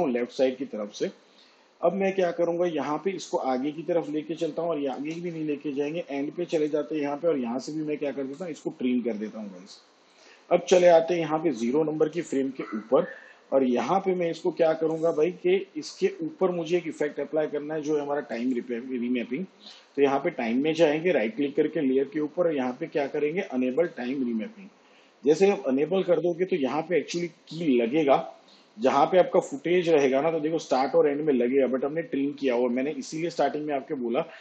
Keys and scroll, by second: 7.8 alt+].